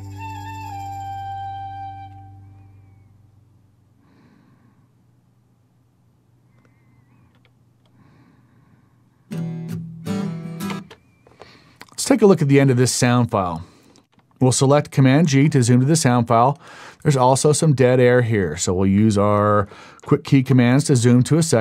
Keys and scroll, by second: 10.7 space, 15.1 super+g.